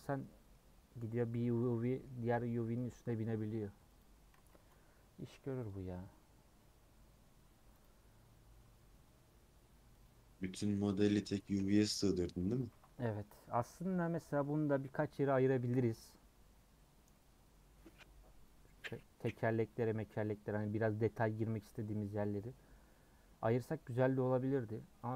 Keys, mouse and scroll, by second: 4.6 Tab, 7.9-10.8 drag, 10.8-11.3 scroll down 6, 11.3-12.6 scroll up 1, 13.2 middle click, 14.0 scroll up 1, 16.7-17.1 scroll up 1, 17.1-20.1 middle drag, 22.4 scroll up 1, 23.3 scroll up 1.